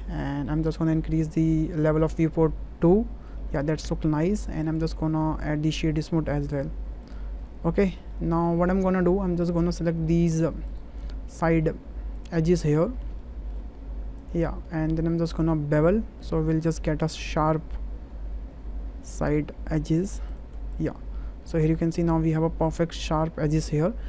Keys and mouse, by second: 0.3 shift+middle click, 3.4 shift+middle click, 4.6-5.9 right drag, 6.3 click, 6.6-7.1 right drag, 7.5-7.9 middle drag, 8.3 shift+click, 8.7 Tab, 9.4 shift+click, 10.0 2, 11.3-11.8 alt+shift+drag, 12.7 alt+shift+click, 13.0 typing, 13.2 middle click, 14.2 alt+shift+click, 14.6-15.7 middle drag, 16.6 ctrl+b, 20.3 click, 20.9 Tab, 21.4-22.3 middle drag, 23.3-24.0 middle drag.